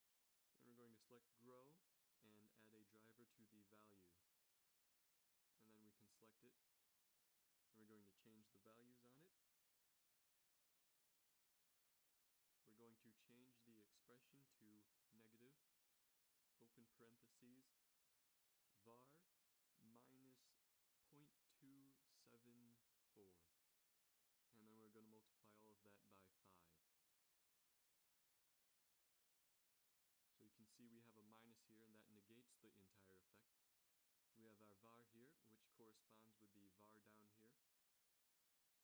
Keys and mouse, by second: 2.7-4.8 drag, 5.7-6.7 middle drag, 6.7-7.4 drag.